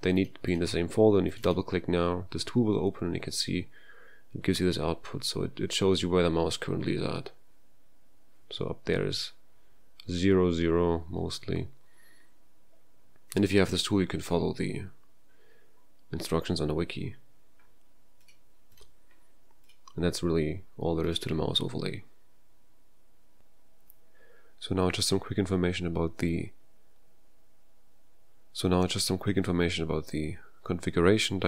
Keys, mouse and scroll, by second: 21.1 click.